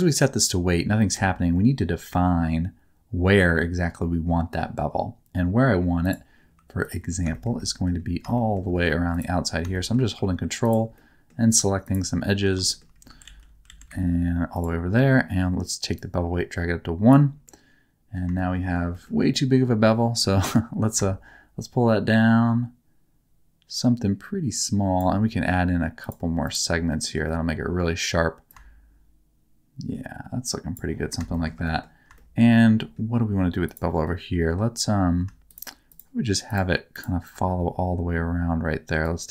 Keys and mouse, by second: 1.1 Tab, 2.0 2, 6.8 ctrl+click, 7.3 shift+middle click, 7.5 middle click, 8.3 shift+middle click, 9.1 ctrl+click, 9.7 shift+middle click, 10.9 middle click, 11.9 ctrl+click, 12.6 shift+middle click, 13.2 alt+z, 13.6 alt+z, 15.9-17.0 middle drag, 17.4 middle click, 18.3 shift+middle click, 18.9 middle click, 21.0-25.0 shift+drag, 26.0 click, 26.8 middle click, 28.5-30.7 shift+drag, 31.3 shift+middle click, 31.6 middle click, 32.1 shift+middle click, 33.6 click, 34.0 middle click, 35.5-37.2 shift+drag, 39.1 click.